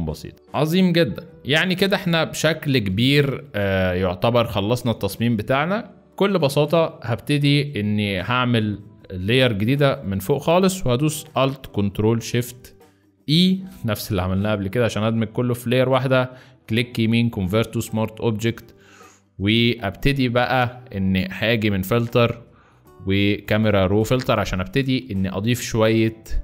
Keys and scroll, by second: 0.3 z, 1.7 space, 6.3 space, 13.4 ctrl+alt+shift+e.